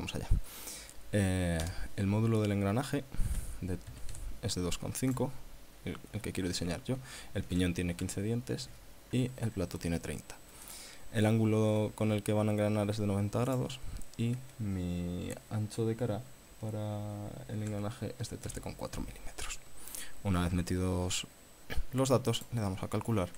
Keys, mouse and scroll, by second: 1.6 BackSpace, 3.3 KP_2, 3.9 KP_Decimal, 4.1 KP_5, 5.1 click, 7.5 KP_5, 8.6 KP_3, 10.6 click, 13.5 click, 17.6 KP_1, 17.7 KP_3, 18.2 KP_Decimal, 18.4 KP_4, 22.4 click, 23.1-23.3 scroll down 3.